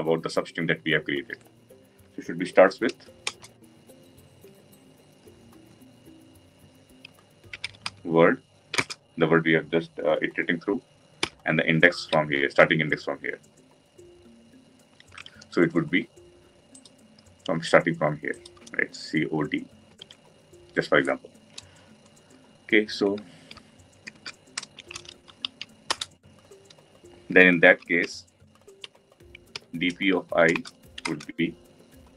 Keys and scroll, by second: 3.3 Return.